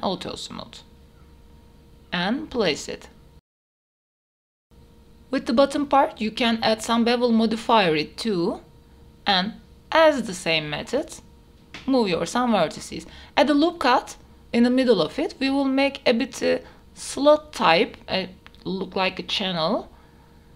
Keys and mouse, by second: 1.6 click, 2.2-3.2 middle drag, 3.3 KP_1, 3.9 g, 4.0 z, 4.5 middle click, 4.8 Tab, 5.0 shift+middle click, 5.2 middle click, 5.4 Tab, 5.8 right click, 6.2 middle click, 6.6-8.3 drag, 8.3 middle click, 8.7 click, 9.2 right click, 9.6 middle click, 9.8 ctrl+a, 9.9 Tab, 10.0 middle click, 10.2 Tab, 10.6 right click, 10.7 middle click, 10.8 Tab, 10.9 click, 11.2-14.3 typing, 11.7 Escape, 11.8 click, 12.6 click, 13.5 click, 13.6 Tab, 13.7 Tab, 13.8 ctrl+r, 15.7 middle click, 16.3 g, 16.4 z, 16.7 click, 16.8 click, 17.6 g, 17.7 z, 18.0 click, 18.1 Tab, 18.2 middle click, 18.8 Tab, 19.1 middle click, 19.4 g, 19.6 z, 20.2 middle click.